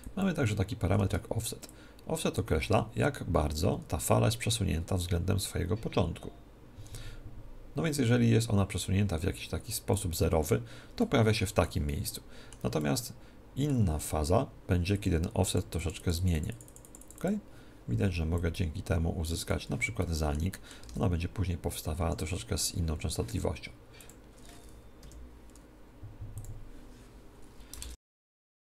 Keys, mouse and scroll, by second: 11.0-14.6 middle drag, 15.0-20.1 drag, 20.8 alt+a, 20.8-22.0 middle drag, 22.0 Escape, 24.0 click.